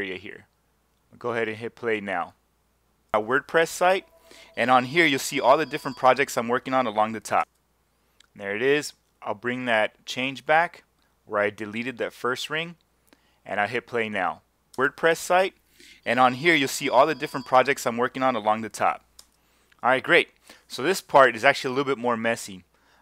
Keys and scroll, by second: 3.1 space, 7.4 space, 14.7 space, 19.2 space.